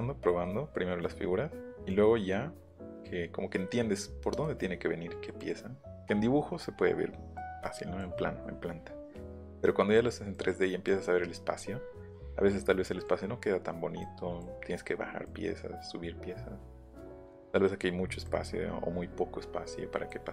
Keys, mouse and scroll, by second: 0.4 middle click, 1.2 middle click, 1.9 middle click, 7.7 middle click, 9.3 middle click, 12.1 middle click, 18.3-20.1 middle drag.